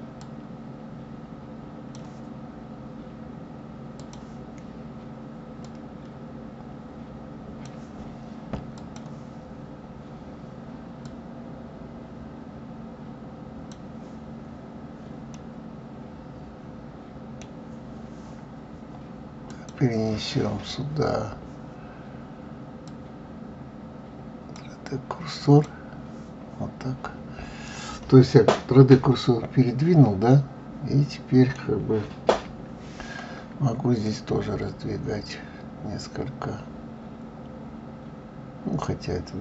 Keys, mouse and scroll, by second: 4.0-5.8 drag, 8.8 click, 11.0-14.0 drag, 15.3-18.3 middle drag, 19.5-22.5 drag, 26.9-27.6 scroll up 2, 27.6-28.9 scroll down 2, 28.9 KP_3, 30.3-32.3 middle drag, 32.3 KP_1, 34.0 click.